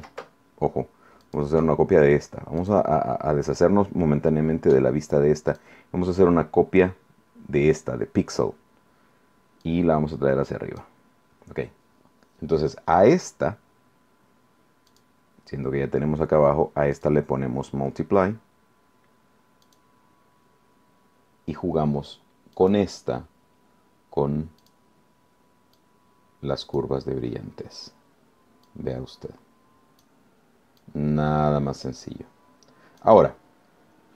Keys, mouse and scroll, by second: 1.2 click, 2.6 click, 5.5 click, 9.6-11.0 drag, 14.9 click, 17.0 click, 19.6 click, 22.6 click, 24.6 click, 25.8-27.0 drag, 28.6-30.2 drag, 30.8-33.2 drag.